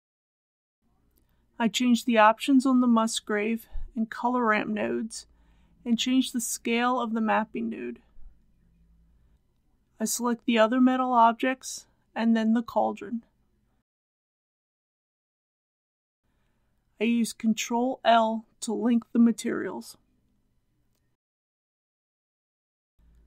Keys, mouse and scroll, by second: 3.0 KP_2, 3.2 KP_5, 3.5 Tab, 5.7 click, 6.9 KP_5, 7.1 KP_0, 9.1 click, 10.0 click, 11.8 ctrl+click, 15.8 ctrl+click, 16.7 ctrl+i, 19.7 click, 22.7 scroll down 1, 23.0 Return.